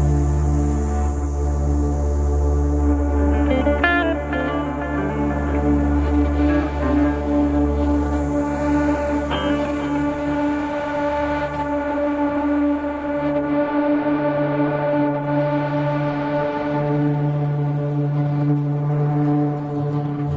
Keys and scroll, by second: 4.7 shift+Page_Down.